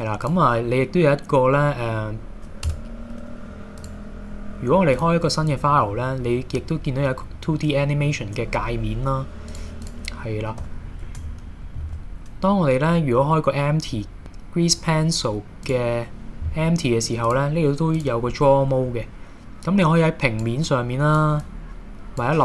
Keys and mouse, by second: 0.4-1.4 drag, 2.7 Tab, 3.8-4.4 drag, 5.0-9.2 drag, 10.6 h, 11.8 shift+a, 17.3-18.3 drag, 19.8 click, 20.7 click, 21.4 click.